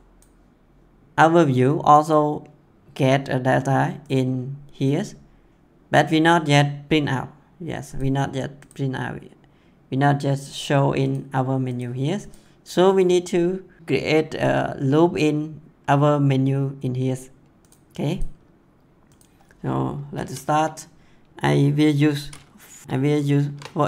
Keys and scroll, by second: 22.8-23.8 typing.